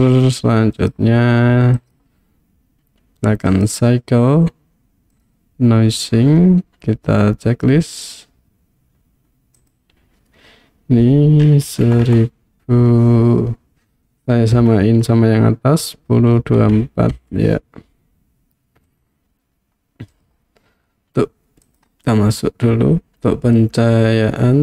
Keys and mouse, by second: 2.0-3.7 drag, 5.2 click, 9.7-19.0 drag, 12.0 KP_0, 20.1 click, 21.8 click.